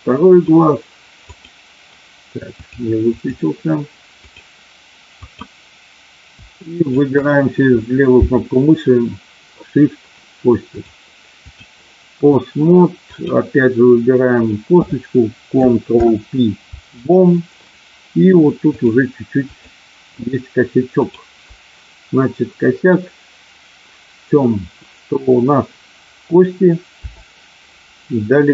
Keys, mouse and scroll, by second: 0.3 click, 1.2 click, 2.7 click, 5.2 click, 6.7 shift+click, 10.7 click, 13.1 click, 15.8 ctrl+p, 18.6-19.6 drag, 20.8 click, 27.0 KP_7.